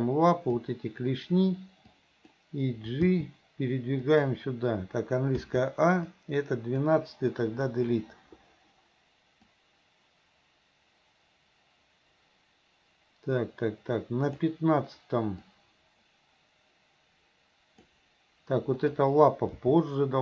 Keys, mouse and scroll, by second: 0.1-0.6 drag, 2.1 click, 3.1 g, 5.4 a, 6.1-6.9 drag, 7.7 Delete, 9.6-14.5 drag, 15.6-17.9 drag, 18.9 click, 19.6 g.